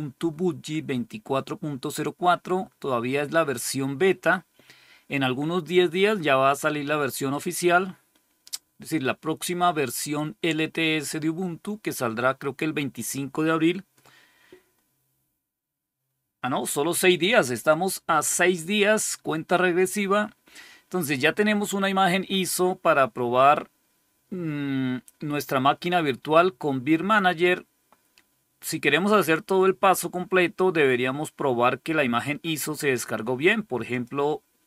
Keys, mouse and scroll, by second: 27.2 click, 33.8 click, 34.4 click.